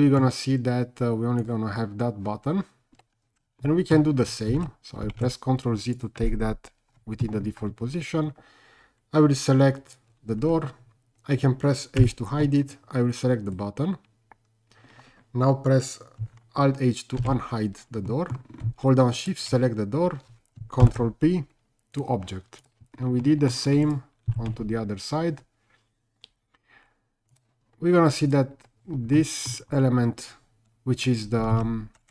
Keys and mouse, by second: 1.4 click, 3.6-3.9 middle drag, 4.6 ctrl+z, 5.3 ctrl+z, 5.9 click, 12.0 h, 13.5 click, 17.2 alt+h, 18.1 middle drag, 20.8 ctrl+p, 23.2-23.5 middle drag, 23.8 click, 24.3 r, 24.5 z, 27.3 click, 28.3 click, 29.2 middle drag, 31.6 ctrl+z.